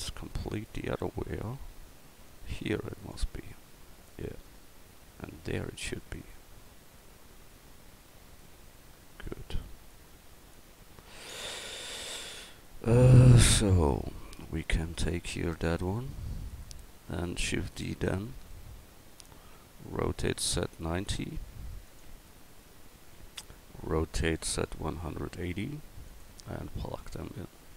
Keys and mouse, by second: 0.7-3.1 drag, 4.1 right click, 4.9 middle click, 5.9 click, 6.0-8.4 middle drag, 8.4-9.1 drag, 9.1 right click, 9.9 middle click, 10.8 a, 15.2-17.5 right drag, 17.5 shift+d, 20.1 r, 22.3-24.3 middle drag, 24.3 r, 27.1 middle click.